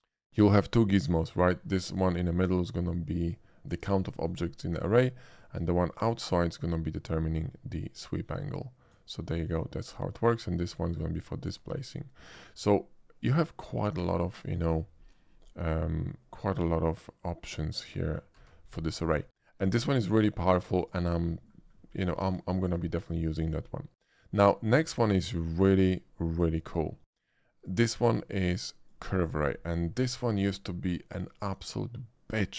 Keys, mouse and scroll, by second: 1.8-3.6 shift+drag, 5.4-8.9 drag, 10.7-11.6 drag, 18.4 a, 18.7 x, 18.8 a, 19.0 click, 19.7 shift+a, 20.8 click, 21.3 middle click, 21.8 middle click, 22.1 shift+middle drag, 22.4 shift+middle drag, 23.1 shift+middle drag, 27.7 click, 28.9 click, 29.7-30.0 scroll down 1, 30.0-31.1 middle drag.